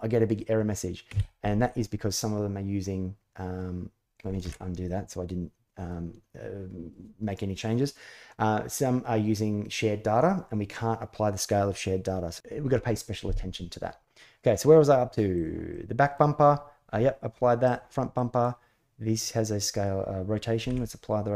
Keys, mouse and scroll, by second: 4.2 ctrl+z, 15.1 click, 15.4-15.9 middle drag, 17.9 middle drag, 20.3 ctrl+a.